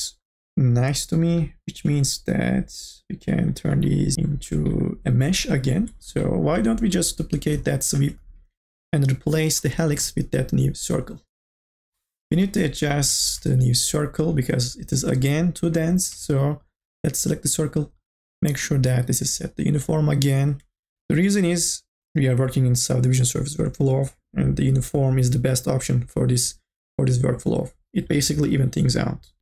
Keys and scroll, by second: 10.0 Delete.